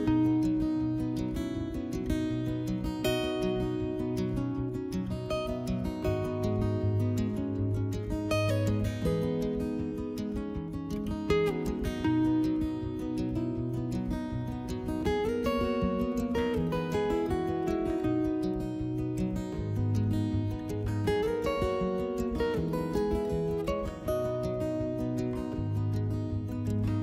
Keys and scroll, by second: 3.2 s, 4.6 2, 4.9 s, 8.0 alt+e, 10.5 s, 22.5 2.